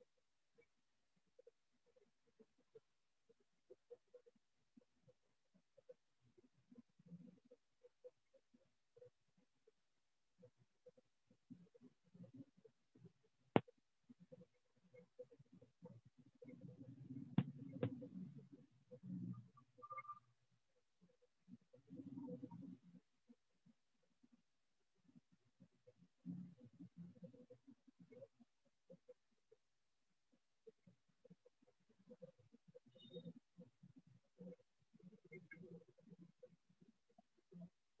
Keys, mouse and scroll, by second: 0.6 click, 5.4 click, 6.5 click, 7.1 click, 7.6 click, 8.2 click, 8.8 click, 9.1 click, 9.5 click, 9.9 click, 10.4 click, 11.2-13.1 drag, 14.4 click, 14.9 click, 15.4 click, 15.8 click, 16.3 click, 16.6 click, 16.8 click, 17.2 click, 17.4 click, 17.5 click, 18.0 click, 18.4 click, 18.7 click, 19.0 click, 19.2 click, 19.6 click, 19.8 click, 20.1 click, 20.7-25.0 drag, 27.9 click, 28.7 click, 29.3 click, 29.8 click, 30.3 click, 30.9 click, 31.4 click, 31.9 click, 32.4 click, 32.8 click, 33.5 click, 34.9 right click, 36.0-38.0 shift+click, 36.5-38.0 alt+click.